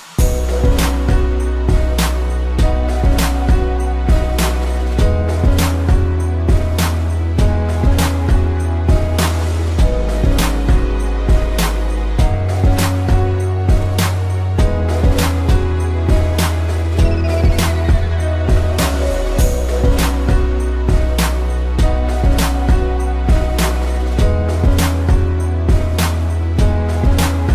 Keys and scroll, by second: 1.9 space, 3.4 a, 3.9 space, 4.7 ctrl+-, 5.3 z, 5.8 p, 8.0 space, 9.7 space, 11.9 space, 12.9 ctrl+=, 13.1 space, 16.1 space, 16.8 ctrl+z, 19.1 space, 19.8 space, 21.6 space, 23.5 space, 26.8 space.